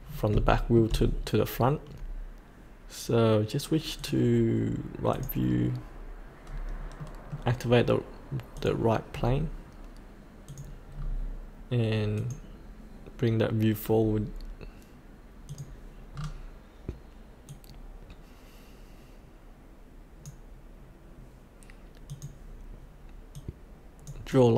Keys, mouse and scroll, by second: 0.5 shift+middle click, 4.0-6.2 drag, 6.4-7.0 scroll down 1, 7.0-8.2 middle drag, 8.5 click, 9.1-10.0 scroll down 1, 10.4 click, 10.9-12.1 scroll up 1, 12.1-13.3 drag, 16.1-17.5 scroll down 1, 17.5-24.5 drag.